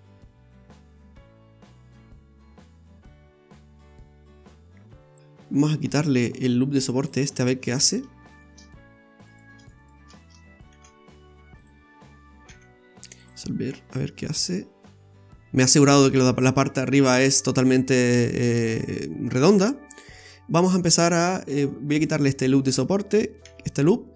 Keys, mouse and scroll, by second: 5.2 scroll up 4, 6.3 click, 7.1 click, 7.4-7.8 scroll down 3, 8.3 alt+shift+right click, 9.3 right click, 9.6 alt+shift+right click, 9.8 right click, 10.7 shift+s, 12.5 x, 13.7 scroll down 1, 14.0 middle click, 17.3 middle click, 22.0 click, 22.6 right click, 23.4 x.